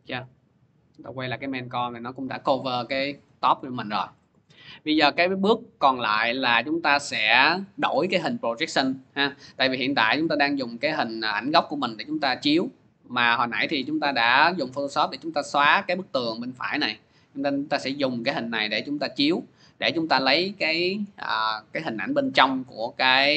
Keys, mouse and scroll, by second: 0.7 click, 4.2 click, 4.9 middle click, 5.6 middle click, 6.4 click, 6.4-7.4 scroll, 7.5 click, 9.8 scroll, 10.8 click, 13.9 click, 14.1 click.